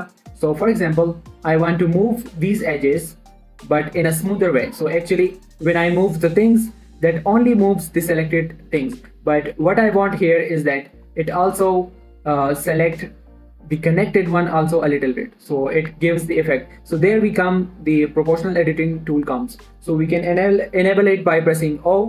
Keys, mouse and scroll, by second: 2.6 g, 2.8 right click, 3.1 click, 3.5 g, 5.2 right click, 5.6 g, 7.3 right click, 9.5 shift+middle click, 9.6 scroll up 1, 9.8 middle click, 11.3 ctrl+click, 11.7 middle click, 16.3 typing.